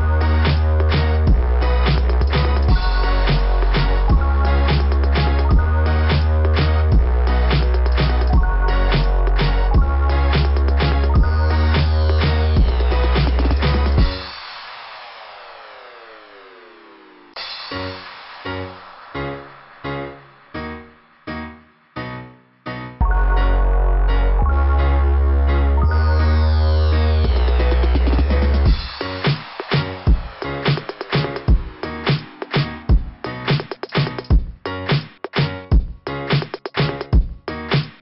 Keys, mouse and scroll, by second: 1.3-2.4 scroll up 1, 2.7 click, 5.6 click, 9.3-9.8 scroll down 1, 10.3 click, 14.6-15.0 scroll up 2, 15.4 click, 18.1 scroll down 2, 19.3 click, 24.6 click, 25.9 click, 28.5 click, 30.3 click, 37.6 scroll down 2.